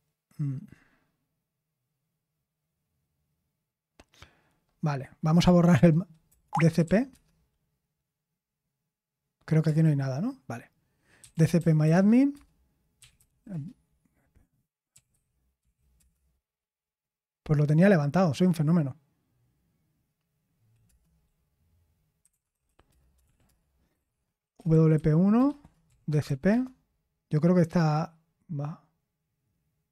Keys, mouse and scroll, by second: 6.4-7.5 typing, 9.6 Return, 9.7-13.7 typing, 14.9-15.5 typing, 15.9 Return, 22.8 Return, 22.8-26.7 typing.